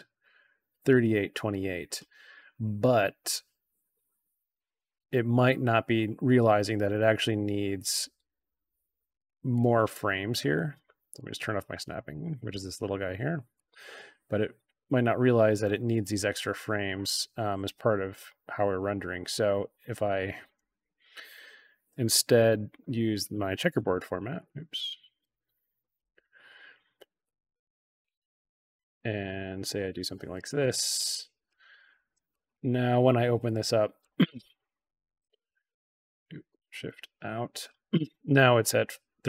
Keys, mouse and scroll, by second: 3.1 click, 6.9-7.8 drag, 9.4 click, 11.1 click, 11.8 click, 13.5-15.9 drag, 16.6 click, 18.0-18.8 alt+drag, 20.0 click, 21.1 =, 22.4 BackSpace, 24.3 click, 25.9 BackSpace, 27.1-28.3 drag, 28.6 click, 29.2-30.3 drag, 31.0-31.4 drag, 31.8 click, 32.2 click, 32.4 click, 34.7 shift+i, 36.4 shift+i, 36.7 shift+o.